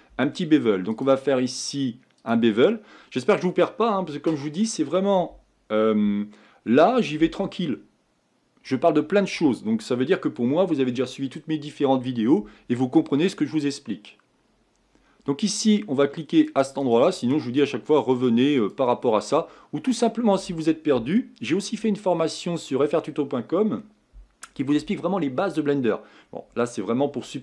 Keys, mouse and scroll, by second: 2.3-23.9 drag, 24.1-27.4 drag.